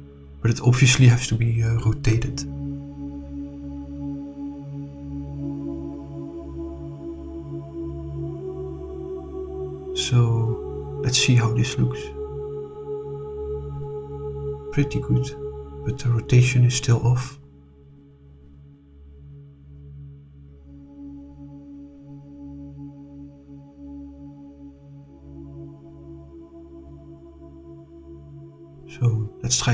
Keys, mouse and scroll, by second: 4.9 r, 5.5 9, 5.6 0, 8.7 click, 9.4 click, 10.0-11.8 drag, 13.0 click, 14.7-17.1 middle drag, 18.1 click, 22.4 click, 23.2-28.1 drag.